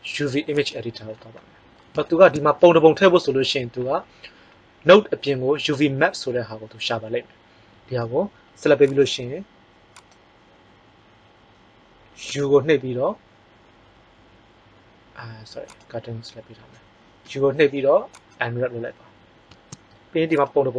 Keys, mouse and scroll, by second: 12.2 u, 17.1 u.